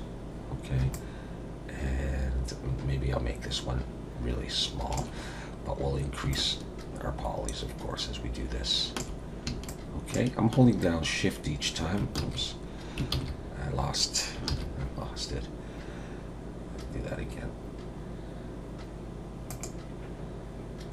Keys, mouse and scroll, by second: 0.9 shift+click, 6.3 shift+click, 9.7 shift+click, 12.2 ctrl+z, 13.1 ctrl+z, 14.5 shift+a.